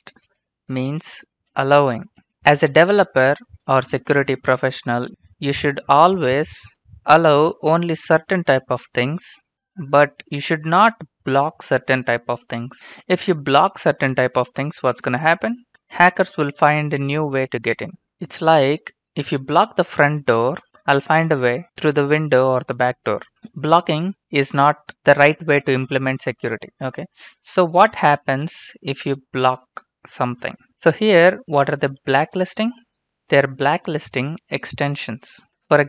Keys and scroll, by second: 0.0-2.2 typing, 28.1 Return, 28.3 Return, 32.3 alt+Tab, 35.3 ctrl+c, 35.5 alt+Tab.